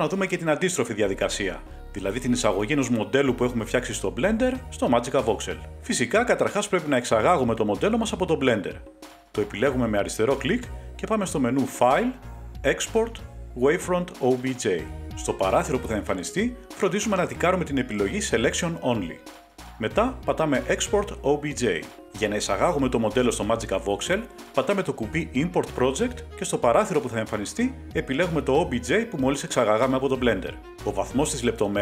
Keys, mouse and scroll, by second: 3.1 click, 4.1-5.3 drag, 7.4-8.1 scroll, 9.6 click, 11.9 click, 14.9 click, 21.7 click, 25.2 click, 27.1 click, 28.5 click, 28.5-29.2 scroll down 1, 29.2-29.8 scroll down 3, 29.9 click.